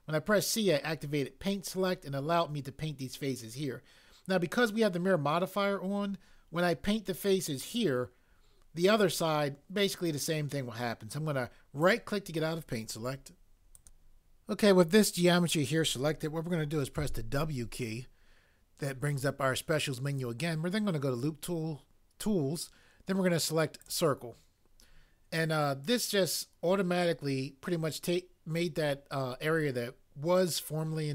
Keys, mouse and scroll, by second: 16.9 w.